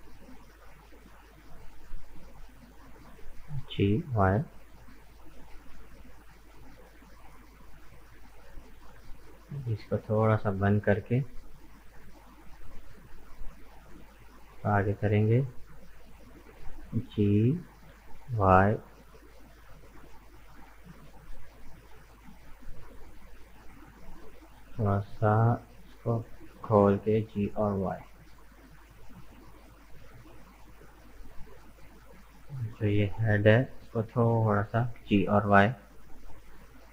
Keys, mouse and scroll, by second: 1.1 right click, 1.5 middle click, 2.0 scroll down 1, 2.3-3.6 middle drag, 3.6 g, 7.7-9.9 middle drag, 9.9 click, 10.5-12.0 middle drag, 12.0 shift+right click, 12.3 scroll up 1, 13.6 shift+right click, 14.0 scroll down 2, 14.3-17.7 middle drag, 17.7 g, 24.4-26.6 drag, 26.6 g, 31.2-32.5 middle drag, 32.5 right click, 33.3 shift+right click, 33.6-34.9 middle drag, 34.9 g.